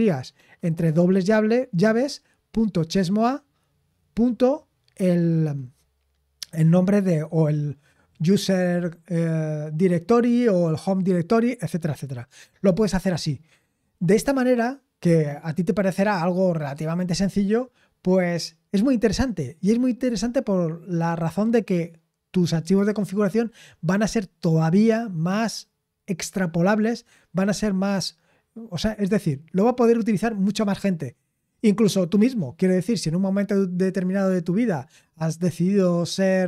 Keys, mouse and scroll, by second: 6.2-36.4 scroll down 3.